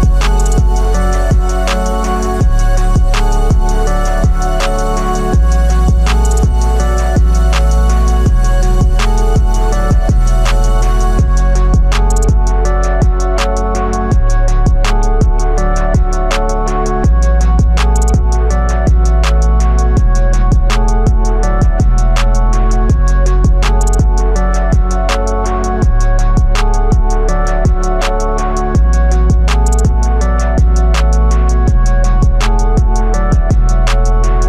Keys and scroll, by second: 7.8 ctrl+z.